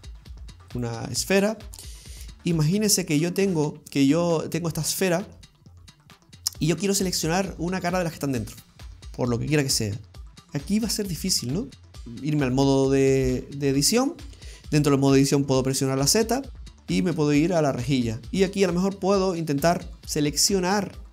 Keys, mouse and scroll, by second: 1.2 scroll down 2, 1.9 ctrl+middle click, 2.5 shift+middle click, 3.1-3.5 scroll up 2, 3.5 middle click, 4.3-4.9 scroll up 3, 4.9 shift+middle click, 5.5-6.1 scroll down 2, 5.9 middle click, 11.2 middle click, 12.0 Tab, 16.1 z, 18.2-18.6 scroll up 1, 18.6 middle click, 19.7 right click, 20.0 middle click, 20.8 right click.